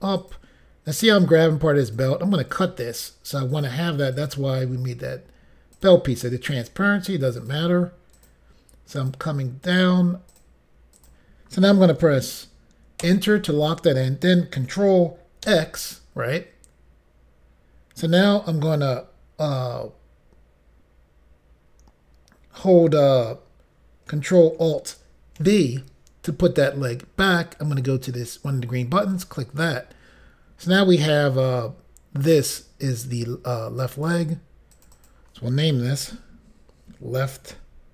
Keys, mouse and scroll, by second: 0.2 click, 1.1 click, 2.4 click, 3.6 click, 5.8 click, 6.5 click, 7.4 click, 8.3 click, 9.7 click, 10.4 click, 11.0 click, 13.1 Return, 15.5 ctrl+x, 25.5 ctrl+alt+v, 29.1 click, 33.9 click, 34.8 click, 34.9 click, 35.0 click, 35.2 double click, 36.1 typing.